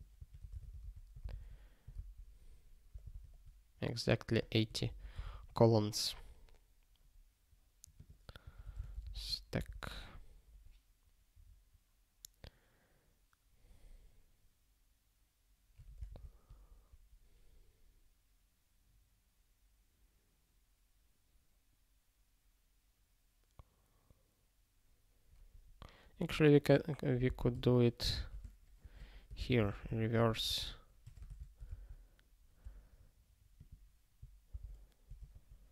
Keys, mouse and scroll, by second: 0.1 -, 1.3 ctrl+s, 1.9 ctrl+e, 4.4 click, 4.9 ctrl+p, 5.2 ctrl+s, 7.9 click, 8.4 -, 9.6 ctrl+s, 26.6 click, 27.2 ctrl+b, 27.6 alt+d, 28.1 ctrl+f, 28.8-30.5 typing, 31.7 ctrl+e, 33.6 click, 34.5 Return, 35.2 ctrl+/.